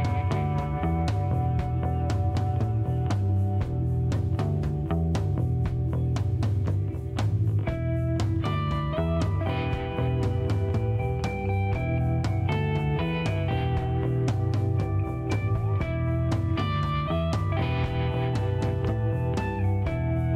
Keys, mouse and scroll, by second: 0.1 middle click, 1.3 scroll up 1, 1.4-7.3 middle drag, 7.3-9.1 drag, 8.9-10.1 middle drag, 10.3-17.6 drag, 17.8 click, 18.0 middle click.